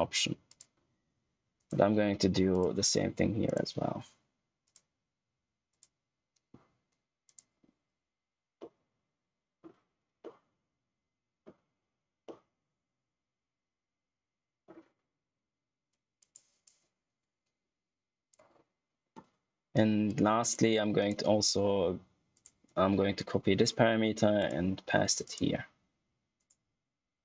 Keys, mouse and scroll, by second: 0.4 click, 1.5 right click, 2.4 click, 4.6 right click, 5.6 click, 8.5 middle click, 10.4 middle click, 12.5 middle click, 16.1 click, 20.3 click, 20.9 right click, 22.3 click, 24.3 click, 25.2 right click, 26.3 click.